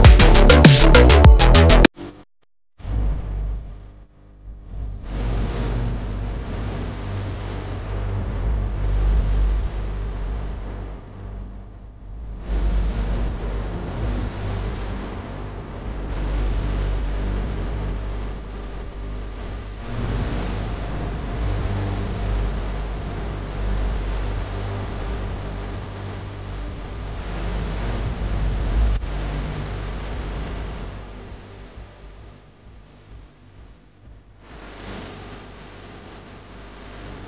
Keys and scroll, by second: 5.1 ctrl+z, 8.2 ctrl+z, 13.4 ctrl+z, 17.3 space, 18.3 ctrl+z, 18.8 ctrl+z, 18.9 space, 19.7 ctrl+z, 21.1 ctrl+z, 25.0 ctrl+z, 31.7 ctrl+z, 32.4 ctrl+z, 33.6 ctrl+z, 34.4 ctrl+z, 35.1 ctrl+z.